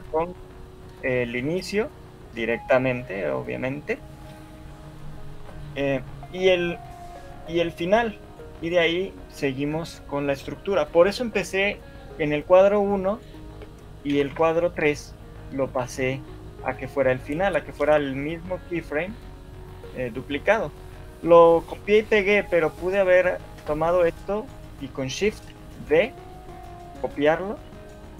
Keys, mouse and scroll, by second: 2.7 click, 13.1 right click, 14.3 Right, 18.3 shift+middle click, 18.3 click, 27.8 Escape, 27.8 shift+d.